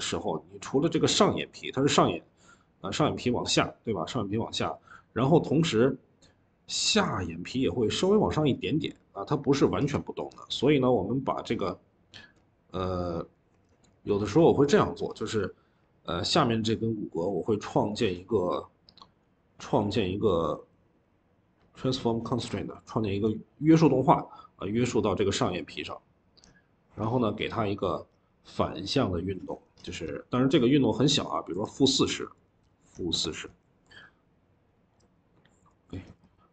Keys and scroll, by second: 1.7 typing.